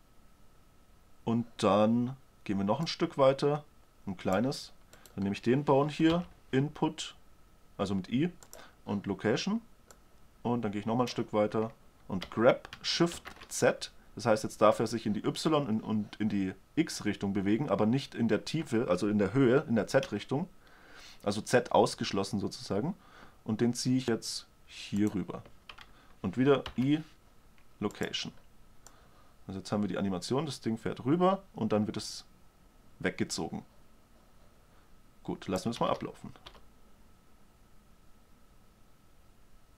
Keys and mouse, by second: 3.3-5.3 drag, 5.5-6.6 right drag, 6.6-7.3 drag, 6.6 i, 10.4-12.5 drag, 12.8 g, 27.1 i, 36.3 alt+a, 36.4 shift+Left, 36.8 alt+a.